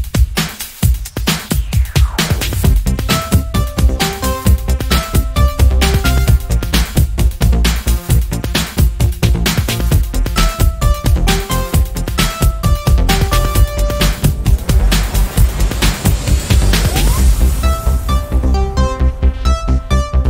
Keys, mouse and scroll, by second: 0.2 click, 1.2 KP_Add, 2.0 click, 3.4 ctrl+shift+click, 5.1-7.0 ctrl+drag, 8.7 click, 11.6 ctrl+d, 13.0 ctrl+click, 14.5 click, 14.9 click, 15.7 click, 16.9 click, 18.0 click, 19.0 click, 19.5-20.2 drag.